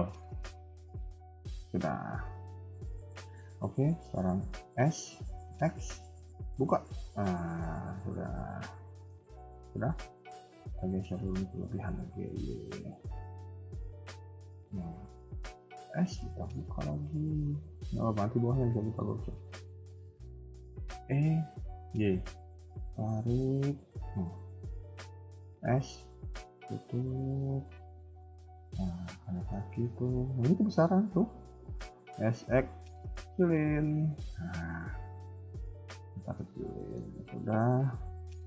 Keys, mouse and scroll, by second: 1.9 shift+middle click, 2.4 KP_1, 4.6 s, 7.6 middle click, 9.2 KP_3, 11.6 g, 15.8 s, 18.7 shift+middle click, 19.5 scroll up 1, 21.0 e, 25.1 s, 27.9 KP_1, 28.5 middle click, 30.1 alt+click, 30.4 middle click, 31.7 s, 34.3 KP_1, 34.6 scroll down 2, 34.8 middle click, 35.9 KP_3, 36.7 shift+middle click, 37.1 middle click, 37.6 scroll up 2, 38.2 KP_1.